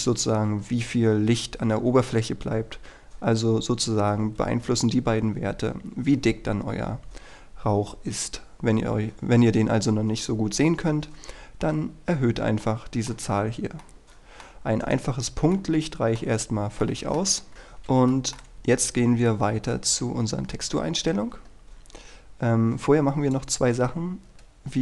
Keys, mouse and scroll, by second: 7.7 scroll down 1, 8.0-10.2 scroll up 1, 12.7 middle click, 13.5-13.9 scroll down 1, 13.9 middle click, 14.9 right click, 15.3-15.7 scroll up 1, 15.7 middle click, 16.5-16.9 scroll down 1, 16.9 middle click, 17.5-17.9 scroll up 1, 18.2 shift+middle click, 18.8-19.4 scroll down 1, 19.4-23.4 scroll up 1, 23.4 click, 24.6-24.8 scroll down 1.